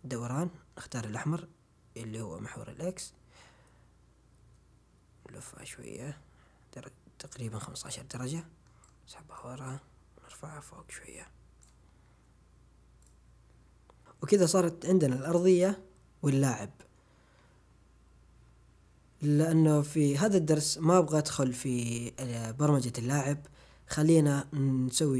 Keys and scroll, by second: 8.1 w.